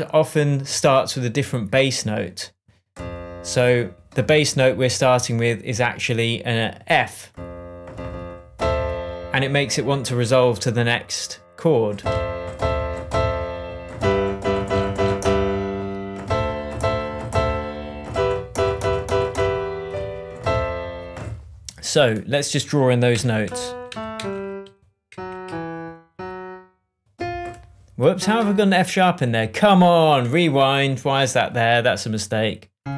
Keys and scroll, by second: 23.1 p, 23.8 Down, 26.1 Up, 28.3 BackSpace.